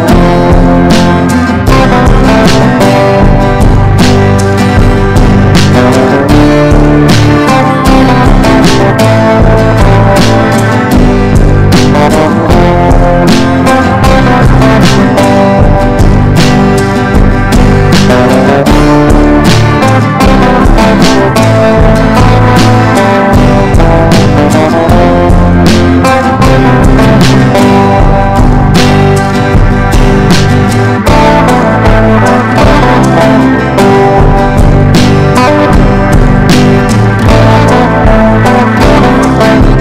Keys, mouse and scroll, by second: 18.7 Down, 18.9 Down, 20.8 click, 27.4 click, 34.1 F4, 34.7 click, 34.9 F4, 35.4 click, 37.6 ctrl+g, 38.8 click.